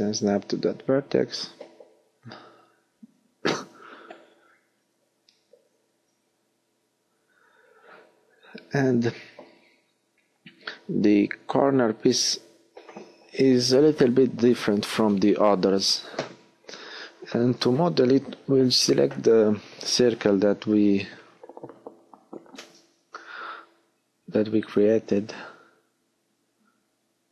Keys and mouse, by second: 2.3-3.3 middle drag, 11.0 click, 15.5 middle click, 17.6 middle click, 19.5 x, 21.9 middle click, 25.5-26.5 middle drag, 25.5 x.